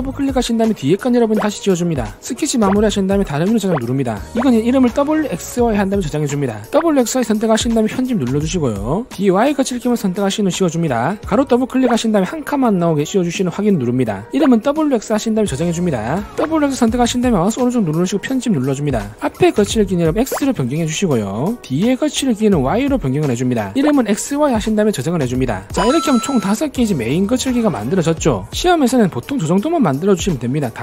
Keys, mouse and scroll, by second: 0.4 click, 0.6 click, 2.0 click, 2.6 right click, 3.4 click, 4.3 click, 7.7 click, 8.1 right click, 9.1 click, 9.5 click, 11.0 shift+click, 11.6 click, 12.2 click, 14.0 click, 16.2 click, 17.3 click, 18.1 right click, 19.3 click, 19.6 click, 20.8 click, 21.1 x, 22.3 click, 23.3 click, 25.7 click, 26.4 click, 26.7 click, 27.0 click, 27.4 click, 27.8 click, 28.0 click.